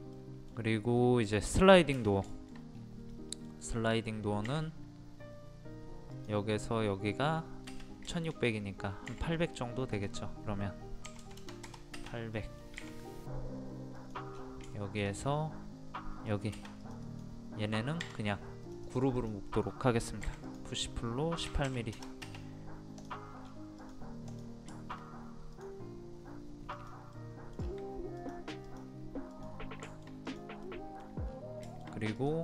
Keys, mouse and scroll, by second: 0.9 scroll up 1, 2.3 shift+middle click, 2.7-3.0 scroll up 1, 3.1 middle click, 3.5 scroll down 1, 3.7-4.5 scroll up 1, 4.5 scroll up 1, 6.1 click, 8.2 shift+middle click, 8.5 scroll up 1, 9.1 scroll up 1, 9.9 click, 11.1 KP_8, 12.4 middle click, 14.0 click, 14.3-14.7 scroll down 1, 14.8 shift+middle click, 15.2-16.3 scroll up 1, 16.3-18.1 drag, 20.2 p, 20.4 click, 21.5 KP_1, 23.0 click, 23.5-23.8 scroll down 1, 23.8 click, 24.7 shift+middle click, 25.6 click, 27.2 middle click, 27.6-28.2 scroll down 1, 28.2 click, 29.9 shift+middle click, 30.3 click, 30.6 middle click, 31.3-31.7 scroll up 1, 31.7 shift+middle click, 31.8-32.2 scroll up 1, 32.2 click.